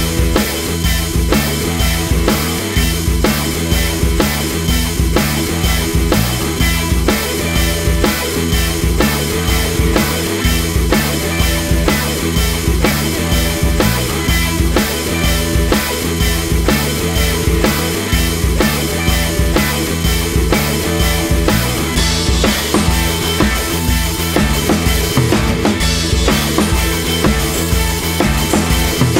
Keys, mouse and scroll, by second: 0.0-7.7 typing, 0.3 scroll up 1, 1.8 scroll up 3, 1.9 middle click, 2.3 click, 3.9 scroll up 2, 4.0 shift+middle click, 4.3 scroll down 1, 5.5 scroll up 2, 5.7 click, 6.2 shift+middle click, 6.6 scroll up 1, 6.8 click, 7.0 shift+middle click, 7.5 click, 8.4 scroll down 3, 8.5 shift+middle click, 8.7-12.8 typing, 9.5 shift+middle click, 9.7 scroll down 1, 9.7 middle click, 10.1 scroll up 1, 10.7 scroll up 1, 11.0 scroll down 1, 12.2 shift+middle click, 12.5 scroll up 1, 13.6 shift+middle click, 13.9-14.7 typing, 16.4-20.8 typing, 17.3 scroll down 6, 17.9 scroll up 4, 17.9 shift+middle click, 18.2 scroll down 1, 18.6 shift+middle click, 18.6 scroll up 1, 19.1 shift+middle click, 19.3 shift+middle click, 19.8 scroll down 3, 20.3 scroll up 3, 20.4 shift+middle click, 21.6 scroll down 4, 21.8 click, 23.3-23.7 drag, 24.0 click, 26.2 click, 26.4 scroll down 3, 26.5 middle click, 27.2 click, 27.6 click, 27.8 scroll up 1, 27.9 KP_Decimal, 28.0 KP_1, 28.6 click, 28.8 f, 28.9 scroll up 2, 29.0 shift+middle drag.